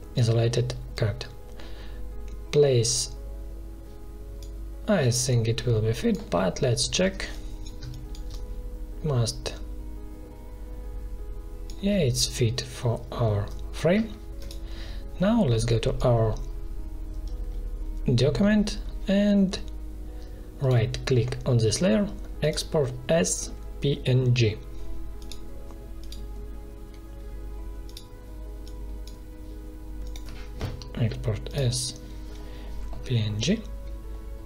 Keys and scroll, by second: 7.7 space.